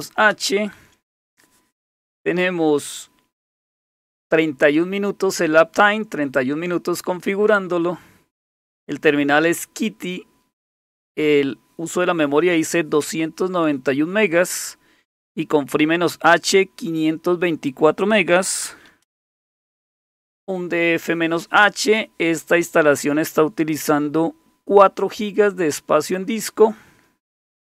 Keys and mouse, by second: 0.0-0.5 typing, 18.4-20.0 typing.